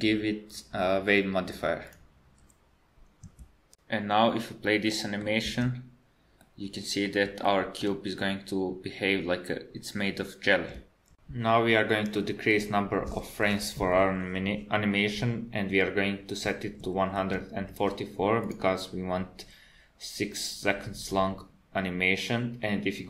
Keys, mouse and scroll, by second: 1.3 click, 4.8 middle click, 5.5 space, 6.4 middle click, 7.5 shift+middle click, 12.5 click.